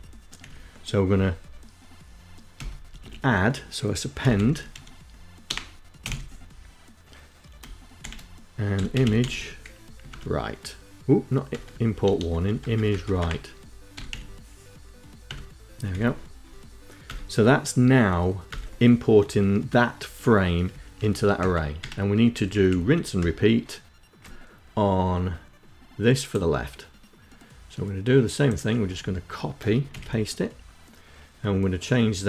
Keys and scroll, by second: 1.7 ., 2.2 a, 3.3-5.7 typing, 7.2-8.9 typing, 9.2 Tab, 10.7-12.0 typing, 13.1 i, 14.4 Tab, 15.1 End, 17.6 Return, 19.9 Up, 20.0 Up, 20.2 Up, 20.5 Up, 20.9 Home, 21.5 shift+Down, 21.8 shift+Down, 27.9 Down, 29.0 shift+Insert, 32.1 Left.